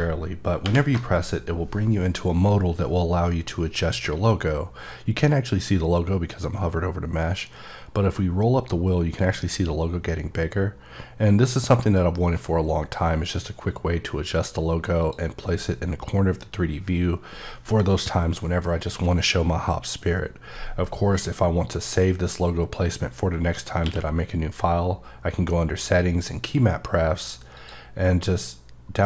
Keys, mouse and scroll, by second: 0.6 alt+shift+l, 7.4-9.5 scroll up 13, 9.5-10.2 scroll down 6, 10.2 scroll, 10.4 scroll up 5, 10.7-11.0 scroll down 3, 11.0-12.0 scroll up 3, 12.0-12.6 scroll down 3, 12.6 scroll down 3, 17.4 click, 23.8 q, 25.9 click, 27.5 click.